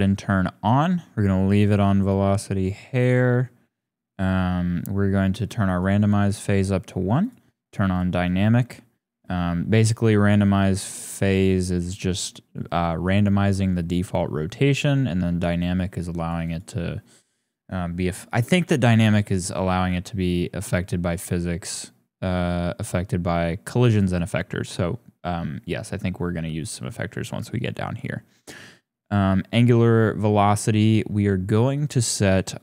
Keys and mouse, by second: 1.4 click, 5.4 click, 7.2 click, 7.9 click, 16.1 click, 16.4 click, 31.7-32.6 drag.